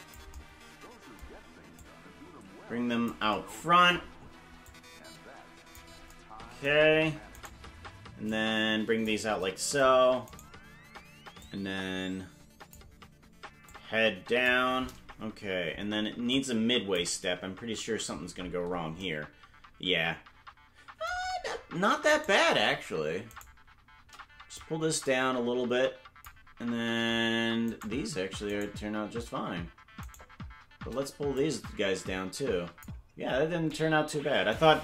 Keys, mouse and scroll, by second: 1.7-3.1 drag, 4.6-5.8 drag, 7.6 right click, 8.2 click, 10.5 right click, 11.4-12.8 drag, 13.6 click, 16.3 click, 17.5 KP_Decimal, 18.1-19.0 scroll down 13, 22.4 right click, 23.6 shift+right click, 24.5-26.3 drag, 27.9 right click, 28.7 right click, 30.2 shift+right click, 31.3-32.8 drag.